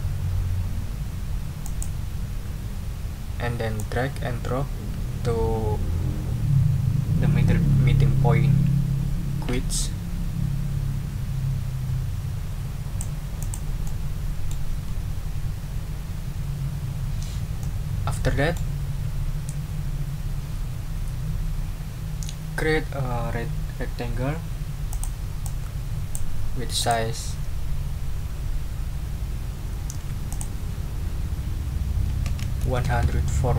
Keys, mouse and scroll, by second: 1.6 click, 3.7-13.2 drag, 13.4 click, 13.8 click, 17.6-18.7 drag, 24.9 click, 25.4 click, 26.8 click, 30.3 click, 32.2 ctrl+a, 32.6 ctrl+1, 32.8 ctrl+0.